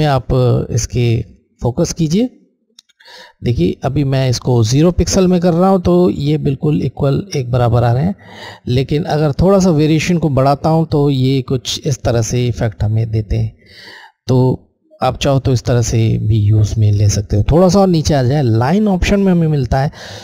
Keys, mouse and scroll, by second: 2.5 click, 2.8 click, 9.2 click, 14.0 click.